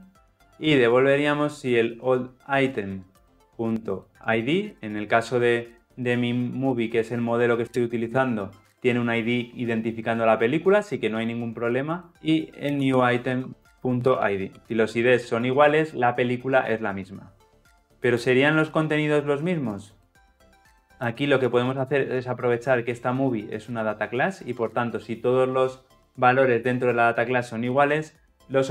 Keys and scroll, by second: 4.1 Return, 13.6 Return, 14.2 Return, 15.0 ctrl+alt+l, 15.2 ctrl+alt+o.